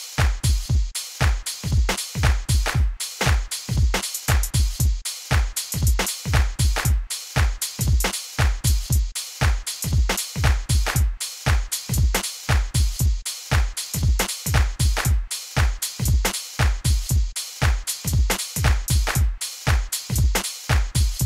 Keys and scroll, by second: 2.9-4.5 typing.